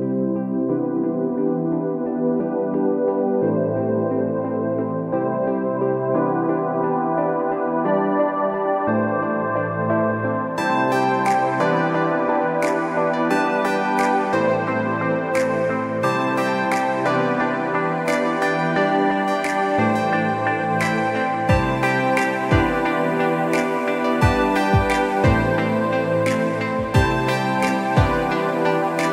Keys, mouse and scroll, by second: 1.2 space, 1.5 click, 1.8 Escape, 2.0 click, 2.7 click, 3.0 Escape, 3.6 alt+scroll down 1, 3.9 scroll up 1, 4.0 click, 5.2 Escape, 5.4 alt+scroll down 1, 5.5 click, 5.6 alt+scroll up 1, 5.9 click, 6.5 Escape, 6.6 alt+scroll down 2, 6.9 alt+scroll up 1, 7.4 click, 8.2 space, 8.4 click, 8.9 space, 9.2 click, 9.5 alt+scroll down 1, 9.8 click, 10.1 Escape, 10.3 click, 10.6 Escape, 10.9 click, 11.4 click, 11.9 Escape, 12.7 click, 13.1 Escape, 13.5 click, 13.7 Escape, 14.0-14.6 alt+scroll down 2, 14.3 space, 14.6 s, 14.8 click, 15.1 alt+scroll up 2, 15.3 space, 15.4 click, 16.7 s, 16.8 click, 17.2 alt+scroll up 2, 17.4 space, 17.6 click, 18.4 z, 18.8 click, 20.5 click, 21.4 Escape, 21.8 click, 21.9 z, 22.2 click, 22.6 Escape, 22.7-23.1 alt+scroll down 3, 23.1 click, 23.2 space, 23.8 click, 23.9 space, 24.1 click, 24.4-24.9 alt+scroll up 2, 24.9 click, 26.7 click, 27.3 scroll down 1, 27.4 click, 28.7 click.